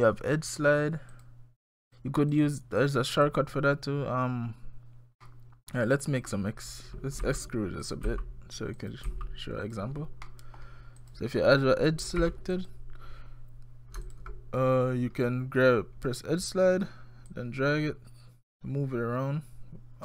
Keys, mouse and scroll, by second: 1.1 click, 1.8 click, 2.3 click, 2.8 click, 3.3 click, 5.2 middle click, 6.1 click, 7.2 e, 8.1 e, 10.3 middle click, 11.0 click, 12.2 2, 12.5 click, 14.1 alt+click, 17.3 click.